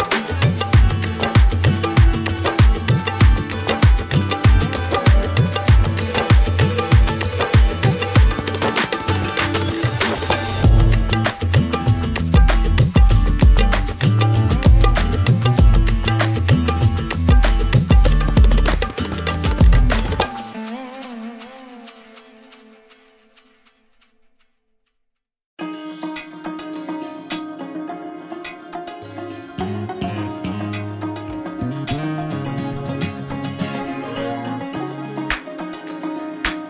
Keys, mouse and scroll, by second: 0.3 click, 0.7-1.6 typing, 2.5 click, 3.0 typing, 4.9 alt+scroll, 5.1 click, 5.8 alt+scroll, 6.4 middle click, 9.2 alt+middle click, 10.2 click, 11.1 ctrl+k, 11.6 middle click, 11.8 click, 12.0 middle click, 12.4 alt+middle click, 12.9 middle click, 13.3 middle click, 13.5 middle click, 13.6 middle click, 14.9 click, 15.7 ctrl+j, 16.2 click, 16.5-17.4 scroll, 18.1 a, 18.3 click, 18.8 right click, 20.4 click, 22.3-23.6 drag, 23.6-25.7 scroll down 21, 25.7 scroll, 26.0 a, 26.5 click, 27.1 scroll, 28.4 click, 28.9 middle click, 29.1-31.0 scroll, 29.4 middle click, 31.1-31.4 scroll up 12, 31.2 middle click, 31.5 f, 32.4 alt+middle click, 32.9 middle click, 34.4 shift+click, 34.9 click, 36.2 middle click.